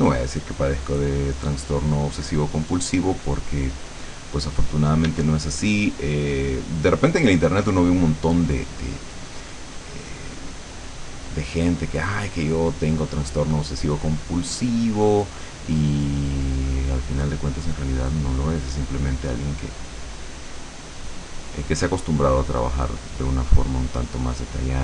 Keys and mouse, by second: 2.5-5.2 drag, 5.2 d, 5.8-7.2 drag, 8.1 click, 9.9-11.9 drag, 12.0-14.7 drag, 15.8-16.9 drag, 17.1-18.1 drag, 18.4-20.3 drag, 22.6 click, 23.4 click, 24.5 click.